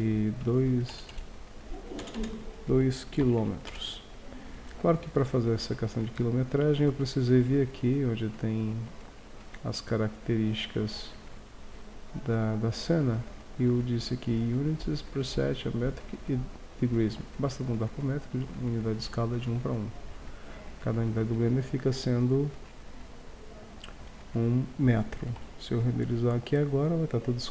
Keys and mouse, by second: 1.2 KP_0, 2.2 BackSpace, 6.6-8.6 drag, 10.4-11.4 middle drag, 12.1 middle click, 12.6-13.0 middle drag, 20.4-22.2 drag.